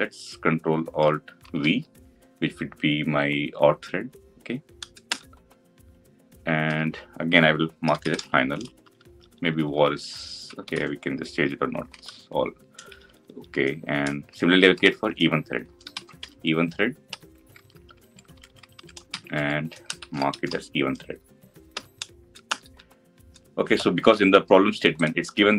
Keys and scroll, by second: 1.4 ctrl+alt+v, 11.9 ctrl+d.